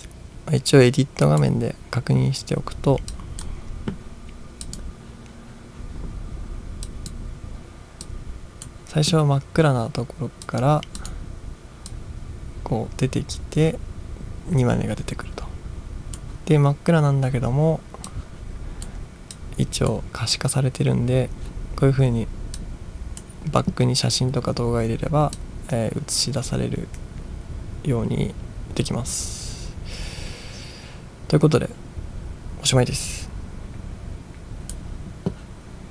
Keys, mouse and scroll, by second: 1.3 click, 3.2-3.5 drag, 4.7-7.1 drag, 8.1 click, 10.5 click, 11.0 click, 11.9-16.2 drag, 18.1-19.1 drag, 19.3-19.9 drag, 22.6-23.2 drag, 25.4-34.8 drag.